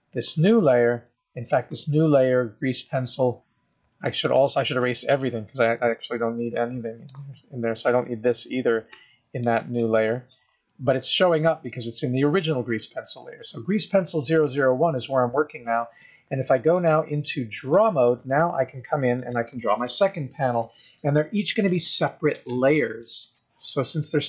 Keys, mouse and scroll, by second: 0.0 click, 4.5 click, 6.0 b, 9.2 x, 14.7 click, 17.0 click.